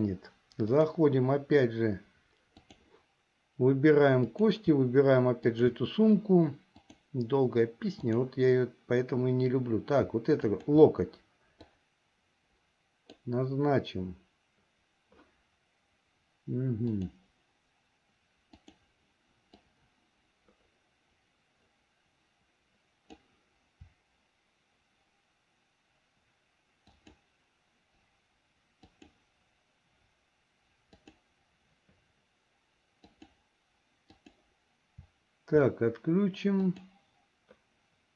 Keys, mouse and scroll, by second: 0.8-3.0 drag, 4.3 click, 5.5 shift+click, 7.0-8.5 drag, 10.5 shift+click, 11.8-13.4 drag, 17.0-19.0 drag, 19.7-23.4 drag, 27.0 shift+click, 28.9 shift+click, 31.0 shift+click, 33.1 shift+click, 34.3 shift+click, 36.6 shift+click.